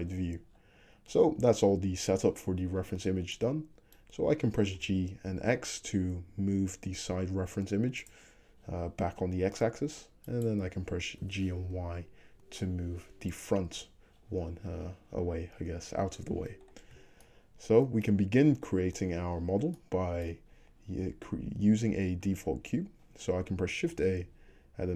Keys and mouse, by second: 3.4-10.4 middle drag, 4.8 g, 10.4 click, 10.5-22.3 middle drag, 11.2 g, 24.0 shift+a.